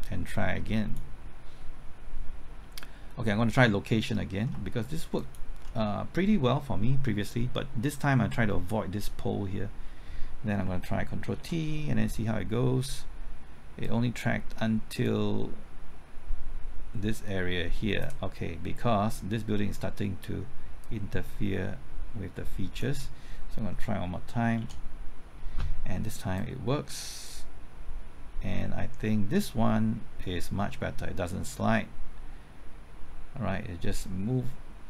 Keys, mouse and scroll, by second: 4.5 typing, 5.1 ctrl+click, 10.6 typing, 11.3 ctrl+t, 13.8-23.4 drag, 24.5 ctrl+t, 26.3-34.8 drag.